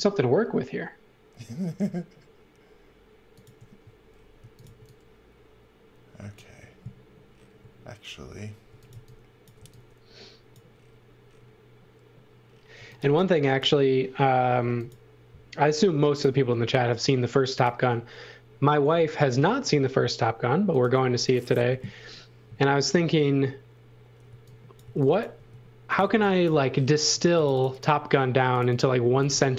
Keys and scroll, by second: 4.1-5.1 typing, 7.6 x, 8.7 x, 9.0 v, 9.6 v, 12.5-14.5 typing, 24.3 x, 24.8 v, 25.3 space, 26.0 x, 27.3 space, 28.8-29.5 typing.